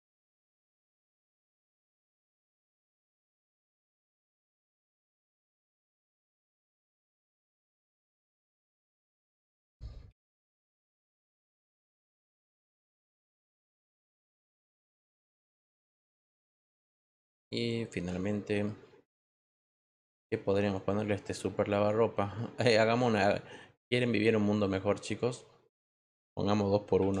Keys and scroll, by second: 0.4-2.8 typing, 10.0 t, 26.9 t.